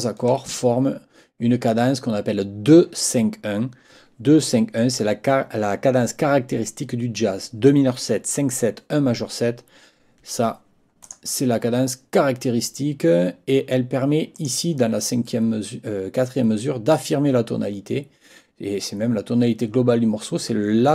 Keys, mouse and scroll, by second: 11.0 click, 14.3 click.